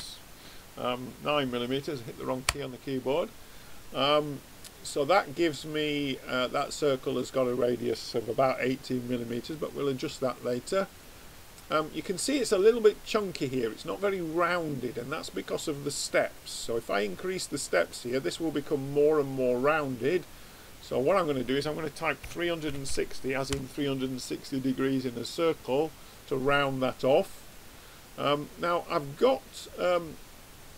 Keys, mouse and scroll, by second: 4.8-11.2 middle drag, 11.4-16.8 scroll up 1, 16.8-19.5 drag, 19.5-22.6 middle drag, 19.6 click, 26.9-29.6 middle drag.